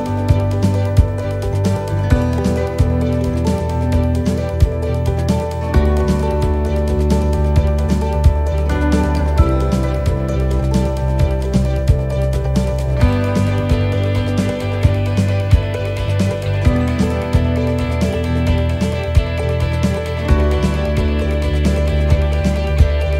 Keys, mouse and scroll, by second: 1.7 click, 4.0 middle click, 5.1 shift+middle click, 5.8 middle click, 7.0 shift+middle click, 7.4 right click, 7.7 middle click, 8.8 click, 10.4 click, 17.9 click, 17.9 middle click, 19.3 right click, 20.1 shift+right click, 21.2 click, 22.3 shift+middle click.